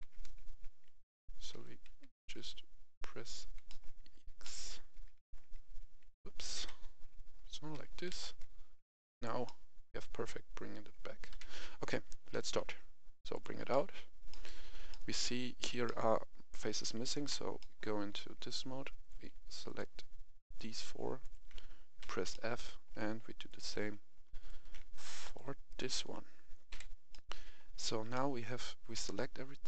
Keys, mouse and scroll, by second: 0.0 x, 0.8 Escape, 1.5 g, 2.0 x, 3.6 middle click, 3.9 Escape, 4.3-5.4 middle drag, 4.9 g, 5.2 x, 6.0 Escape, 6.5 KP_1, 7.7 g, 8.0 x, 9.1 click, 9.4-11.3 middle drag, 11.3 KP_1, 11.8-12.3 scroll down 1, 12.3 g, 12.6 x, 13.3 click, 13.6-17.1 middle drag, 17.1 Tab, 17.5 middle click, 19.0 right click, 19.6 shift+right click, 20.4 shift+right click, 22.0 shift+f, 22.2 middle click, 23.4 right click, 24.3 shift+right click, 25.2 shift+right click, 25.6 shift+right click, 26.7 shift+f, 27.0 middle click, 28.3 a, 28.9 a.